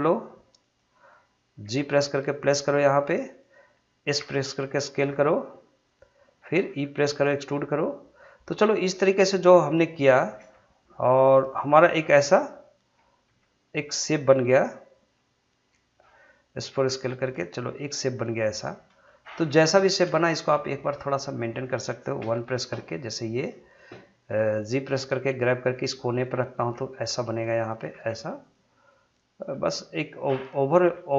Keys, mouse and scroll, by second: 0.6 click, 1.6 g, 3.4 click, 4.2 s, 5.8 click, 6.7 e, 9.9 click, 10.4 r, 11.5 click, 13.2 e, 14.0 click, 16.7 s, 18.0 click, 18.5 scroll up 1, 19.3 shift+middle click, 20.0 scroll up 1, 20.2 shift+middle click, 22.2 1, 23.2 click, 24.8 g, 25.7 click, 26.5 g, 27.0 click, 27.9 g, 28.4 click, 29.5 g, 30.0 click, 30.8 g.